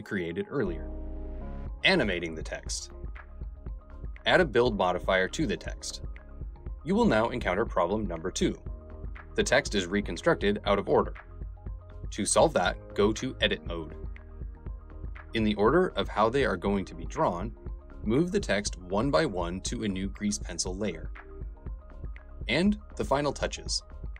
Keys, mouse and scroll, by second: 1.1 Tab, 2.3 click, 3.4 Tab, 3.9-5.1 drag, 6.6 space, 15.5 m, 16.5 click, 16.7-22.7 typing, 18.1 click, 19.5 click, 23.2-24.1 drag.